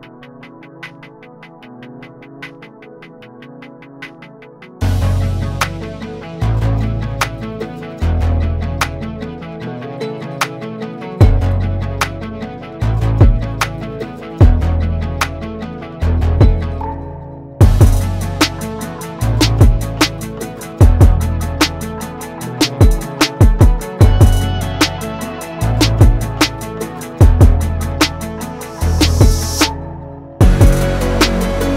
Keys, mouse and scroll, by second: 2.1 ctrl+shift+], 2.8-7.1 drag, 7.1 ctrl+g, 8.2 ctrl+z, 10.4 click, 12.2 click, 18.4-24.7 drag, 24.7 ctrl+g, 27.7-29.2 drag, 31.4-31.7 drag.